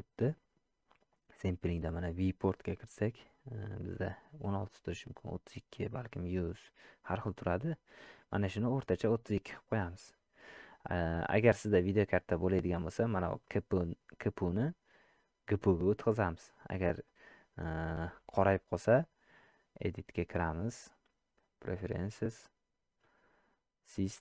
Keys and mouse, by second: 13.5-15.7 drag, 20.6-23.0 drag.